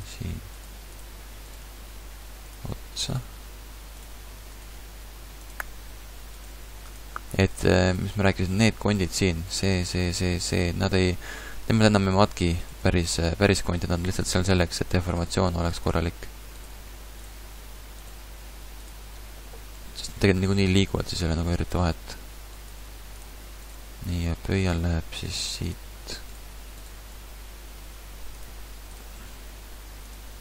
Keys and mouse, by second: 0.6 g, 1.6 g, 3.2 g, 4.8 g, 6.5 g, 7.6 g, 8.7 g, 12.8 g, 15.3 g, 16.7 g, 18.1 g, 20.8 click, 20.8 g, 22.8 g, 25.0 g, 25.4 g, 27.1 g, 29.5 g.